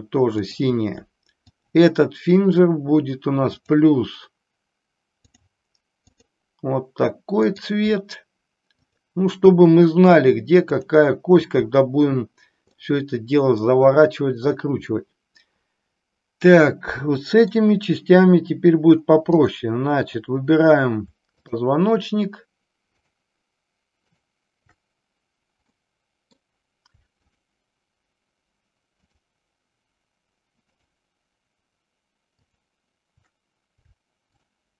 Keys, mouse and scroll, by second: 0.4 click, 1.5-2.2 drag, 3.6 drag, 5.4-6.4 drag, 7.6 click, 8.7 click, 10.7 click, 12.8 middle click, 15.0-17.6 middle drag, 19.3-20.6 drag, 21.5 shift+click, 23.0 shift+click, 24.1-25.3 shift+drag, 25.7-26.3 middle drag, 27.2-28.5 shift+drag, 29.1-30.3 shift+drag, 30.7-32.0 shift+drag, 32.5 shift+click, 34.3-34.7 shift+drag.